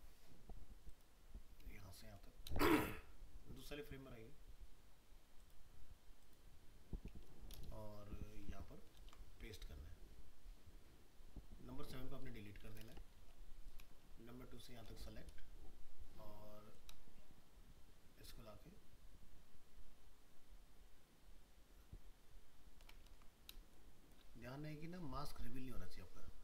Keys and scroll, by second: 2.5 ctrl+c, 8.9 ctrl+v, 23.1 ctrl+z.